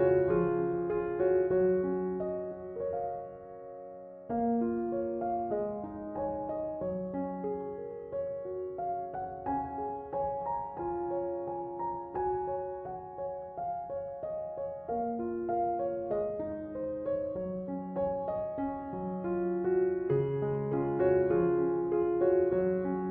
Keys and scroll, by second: 8.8 BackSpace, 15.8 BackSpace.